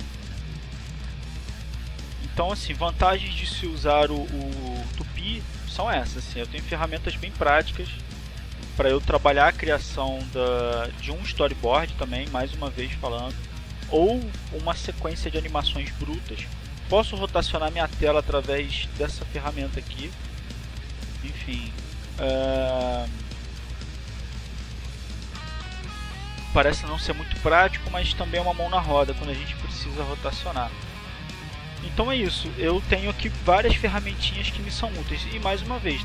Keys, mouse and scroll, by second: 0.6 click, 1.9 click, 3.1 click, 4.4 click, 5.6 click, 6.9 click, 8.1 click, 11.8 click, 13.5 click, 23.0 click, 24.0 click, 24.8 click, 25.4 click, 26.2 click, 27.3 click, 28.1 click, 29.2 click, 30.1 click, 30.8 click, 32.4 click, 33.2 click, 34.2 click, 35.0 click.